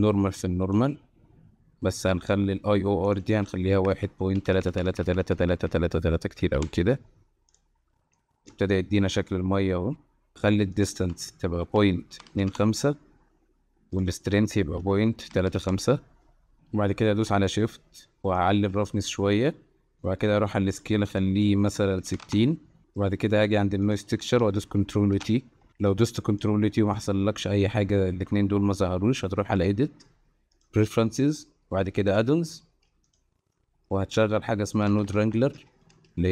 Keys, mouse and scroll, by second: 3.5-6.6 drag, 4.5-5.5 typing, 7.5 drag, 8.1-8.5 middle drag, 8.7 shift+middle click, 9.1-10.3 middle drag, 10.8-12.5 drag, 14.0-15.6 drag, 18.4-19.9 shift+drag, 20.0 middle click, 20.9-22.3 drag, 22.8 middle click, 25.2 ctrl+t, 25.9-26.4 drag, 26.9 click, 29.7-30.9 drag.